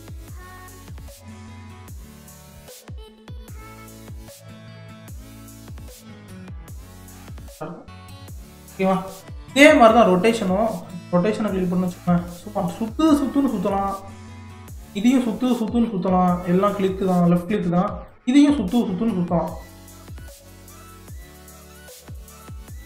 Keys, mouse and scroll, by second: 2.5-3.5 drag, 4.8-6.3 drag, 6.7-9.7 middle drag, 9.7-10.9 drag, 11.9 click, 14.7 click, 18.1 click, 19.8-20.4 right drag, 20.4 click, 21.8 ctrl+z, 22.1 ctrl+z, 22.3 ctrl+z, 22.7 ctrl+z.